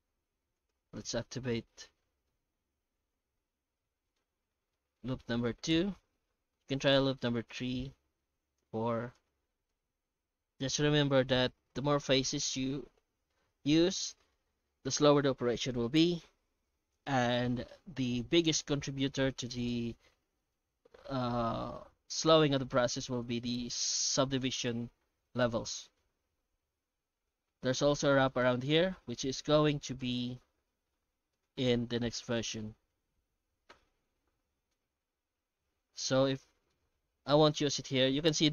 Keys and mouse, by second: 1.6 alt+shift+z, 2.3-4.2 middle drag, 4.5 shift+middle drag, 5.0 middle click, 5.5 shift+middle click, 6.1 F9, 34.4 middle drag, 35.4-36.7 middle drag, 37.4-37.7 shift+middle drag.